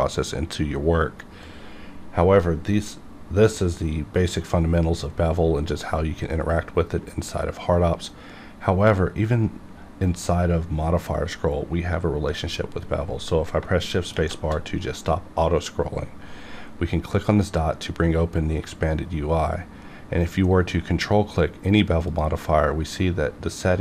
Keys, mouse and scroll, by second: 13.6 shift+Num_Lock, 17.3 click, 20.7 ctrl+Num_Lock, 20.7 click, 22.1 ctrl+click.